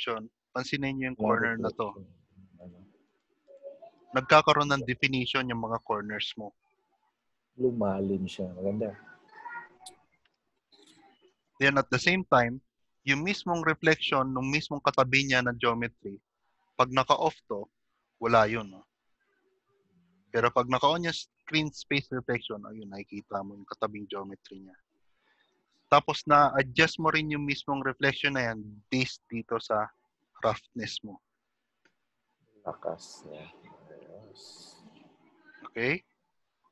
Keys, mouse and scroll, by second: 3.0 click, 3.0 scroll up 2, 4.7 middle click, 6.7 scroll down 1, 7.7-9.7 click, 7.7-8.1 scroll down 3, 12.7 middle click, 13.6 scroll up 1, 15.0-15.9 scroll up 1, 17.1 click, 21.9 click, 29.9 click.